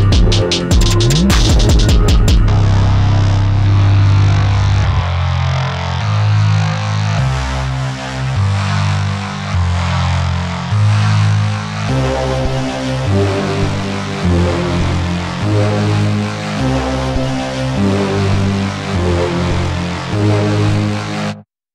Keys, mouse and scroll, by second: 5.6-13.3 shift+drag, 13.3-21.3 alt+drag, 21.3 space, 21.6 click.